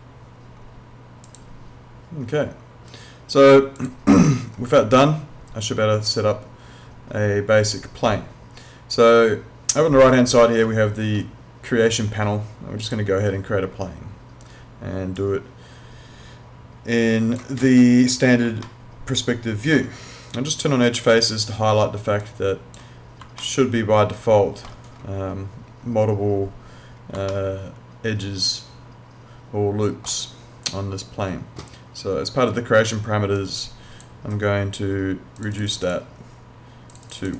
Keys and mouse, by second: 1.3 click, 5.9 click, 12.8 click, 18.7 alt+middle click, 20.9 right click, 22.2 click, 23.5 alt+middle click, 27.3 alt+middle click, 33.4 click.